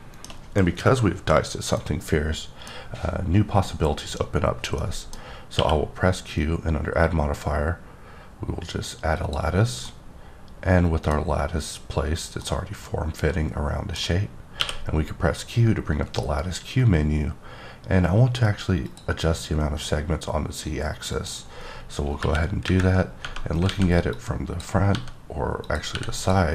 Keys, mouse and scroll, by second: 4.8 middle click, 5.5 q, 9.1 click, 9.8-11.4 middle drag, 12.4 middle click, 14.6 q, 18.8 click, 21.1 click, 22.1 KP_1, 22.7 KP_3, 23.7 alt+a, 24.1 click, 24.9 g, 25.6 click, 25.9 r, 26.2 click.